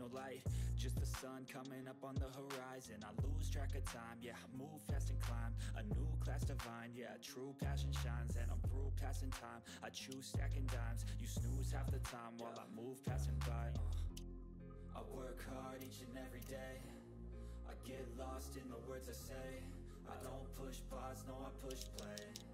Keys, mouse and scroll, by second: 3.1-8.0 drag, 10.0 ctrl+scroll down 1, 10.2 ctrl+middle click, 10.9 click, 11.6-11.9 scroll down 1, 11.9 click, 14.1-14.4 ctrl+scroll up 1, 15.5 click, 16.6 shift+click, 20.2 click, 21.7 ctrl+z.